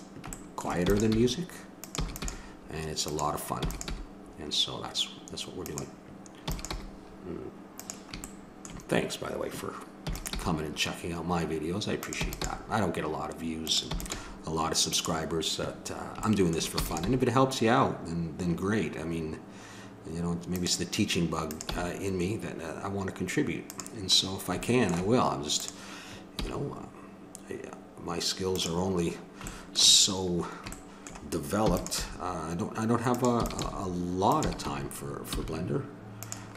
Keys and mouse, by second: 0.3-2.0 middle drag, 0.9 e, 1.2 g, 2.4 g, 3.6 e, 3.9 g, 6.5 e, 6.7 g, 10.1 e, 10.4 g, 12.2 e, 16.2 middle click, 16.8 e, 17.2 g, 21.5-23.2 drag, 21.7 g, 25.6-27.0 drag, 26.4 g, 29.5 middle click, 30.0 middle click, 31.7 e, 32.0 g, 33.4 e, 33.6 g, 34.4 e.